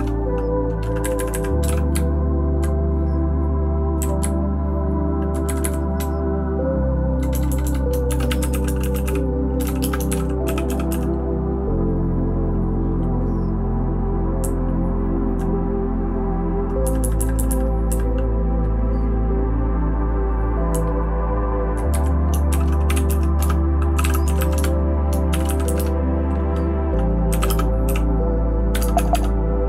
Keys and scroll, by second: 0.0-2.4 typing, 2.5 Right, 2.6 Right, 4.0 Down, 4.2-5.3 Right, 5.4 Right, 5.6 Right, 6.0 Home, 6.5-7.1 Home, 7.3 Home, 7.5 Home, 7.6 Home, 7.8-11.4 typing, 14.4-15.3 Left, 16.8 Left, 17.0 Left, 17.1 Left, 17.3 Left, 17.9 Left, 20.7 Right, 21.2-21.7 Right, 21.9 Right, 22.2-25.1 typing.